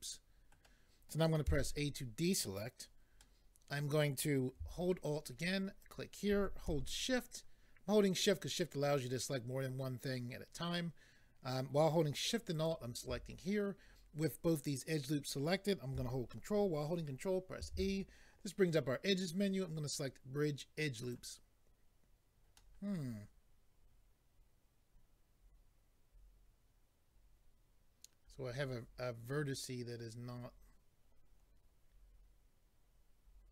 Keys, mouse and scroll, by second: 1.5 a, 3.2 middle click, 5.8 alt+click, 17.6 ctrl+e, 21.0 click, 22.5 middle click.